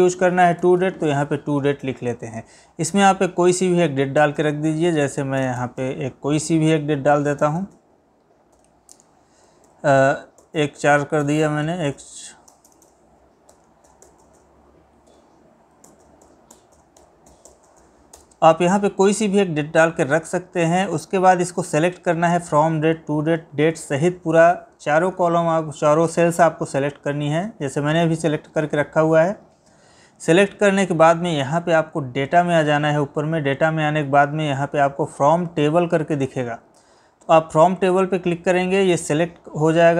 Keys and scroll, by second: 8.6 Tab, 9.8 Left, 15.2 Tab.